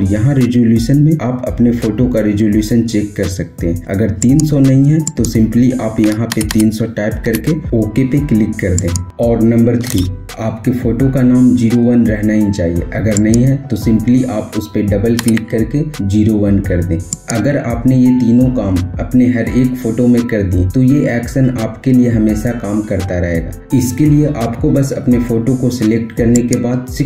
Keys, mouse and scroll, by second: 3.6 click, 7.1 Return, 8.5 click, 12.7 click, 12.7 typing, 12.7 click, 15.3 typing, 16.8 click, 19.1 typing, 26.1 click, 26.1 typing.